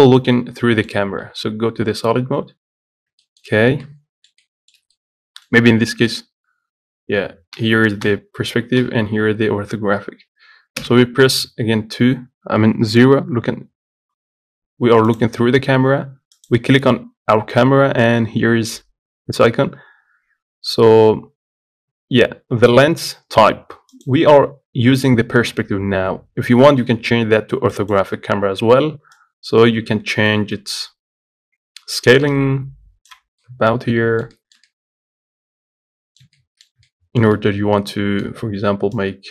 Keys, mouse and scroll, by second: 0.6-2.8 middle drag, 2.8 z, 3.2 scroll down 1, 3.5 shift+middle click, 3.8-4.2 scroll up 1, 4.2-6.4 middle drag, 6.4 KP_5, 7.8 KP_5, 11.1 KP_0, 15.4 click, 16.8 click, 28.2 click, 29.5-32.4 drag, 33.7-39.3 middle drag.